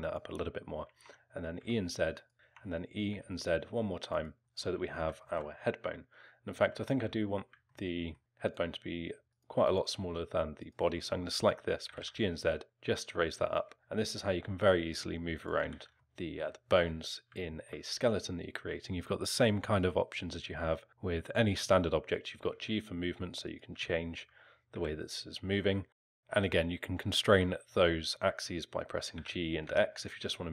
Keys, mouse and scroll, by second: 0.9 e, 2.3 ctrl+z, 2.4 e, 4.4 alt+middle click, 5.2 alt+middle click, 6.8 alt+middle click, 7.7 alt+middle click, 8.5 click, 9.3 click, 9.6 click, 10.6 click, 11.9 g, 13.5-13.8 typing, 15.7 ctrl+z, 16.0 alt+middle click, 17.0 scroll up 1, 17.5 alt+middle click, 22.4 g, 23.8 alt+middle click, 24.7 g, 25.8 r, 26.1 ctrl+z, 26.1 click, 26.1 alt+middle click, 29.1 g.